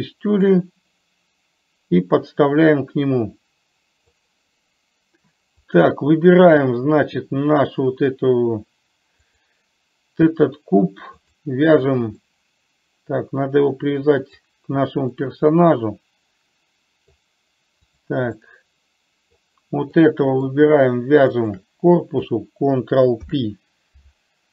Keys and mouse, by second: 0.6-4.4 drag, 9.4 click, 12.4-14.7 middle drag, 15.3-17.3 middle drag, 18.2 click, 18.7-19.6 middle drag, 20.3-20.7 middle drag, 23.3 ctrl+p.